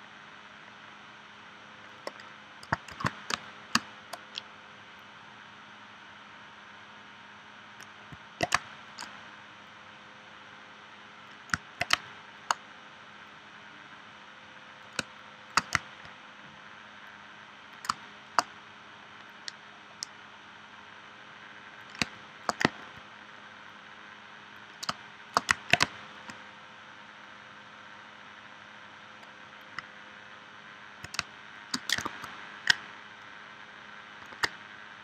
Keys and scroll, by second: 2.9 shift+c, 3.3 space, 8.5 space, 11.9 space, 15.0 space, 17.9 space, 22.0 space, 24.9 space, 25.8 space, 31.2 space, 34.3 super+Tab.